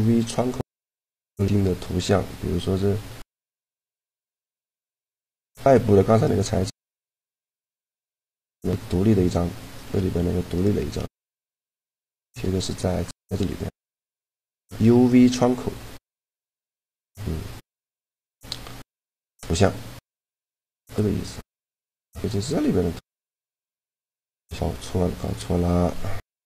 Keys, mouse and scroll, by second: 2.3 middle click, 2.8 a, 4.4 Tab, 9.7 Tab, 10.9 shift+g, 15.7 middle click, 18.1 shift+g, 22.0-23.2 drag, 23.6 click.